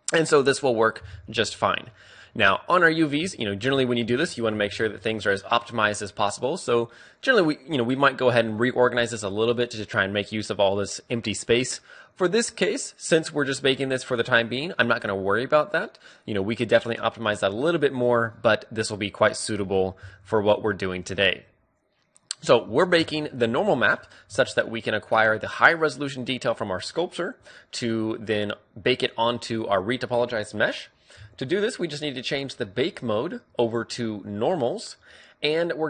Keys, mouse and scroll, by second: 3.6 ctrl+a, 3.6-4.8 middle drag, 4.8 ctrl+p, 20.8 n, 21.9-23.7 drag, 23.7-25.8 middle drag, 24.5 Tab.